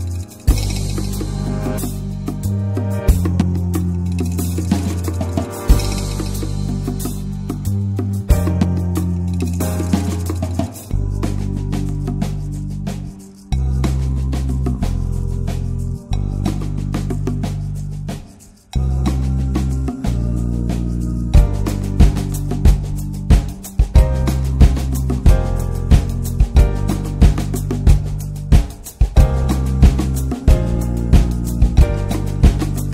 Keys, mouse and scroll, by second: 1.0-2.9 drag, 2.9 middle click, 3.6 scroll down 3, 4.4 alt+middle click, 5.0-6.0 scroll up 3, 6.0-7.7 shift+middle drag, 7.7-10.8 drag, 12.4-14.7 drag, 17.1-22.4 drag, 23.9-26.2 middle drag, 26.2-28.7 drag, 29.5-31.1 middle drag, 31.1-32.9 drag.